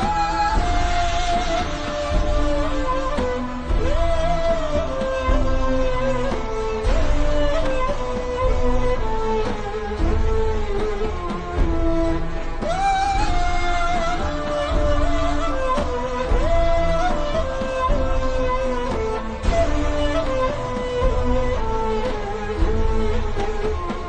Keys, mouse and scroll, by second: 0.3 alt+shift+scroll up 2, 0.6 click, 2.4 shift+click, 3.2 shift+click, 3.4 shift+click, 5.1 click, 5.5 v, 6.1 click, 6.7 alt+shift+scroll down 1, 7.3 alt+shift+scroll up 1, 7.6 click, 10.3 i, 10.4 click, 10.7 v, 10.9 click, 11.4 scroll up 1, 11.6-12.6 ctrl+scroll down 4, 12.6 click, 14.1-14.4 scroll up 1, 15.1 scroll down 1, 15.4 click, 19.3 shift+click, 22.0 shift+click, 23.2 click, 23.5 v.